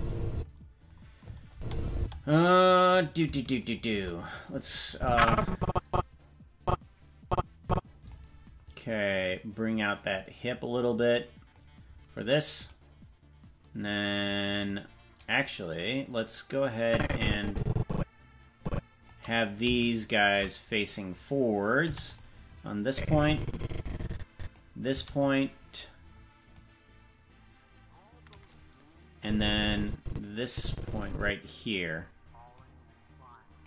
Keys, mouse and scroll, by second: 0.3 space, 1.5 space, 1.9 space, 3.0 right click, 3.7 shift+right click, 4.3 right click, 4.9-8.1 drag, 9.1-11.6 drag, 12.7 right click, 16.8-19.1 drag, 20.1 shift+right click, 21.8 i, 22.9-24.6 drag, 24.9 i, 26.5-28.4 drag, 27.8 i, 29.2-31.8 drag, 32.5-33.6 drag.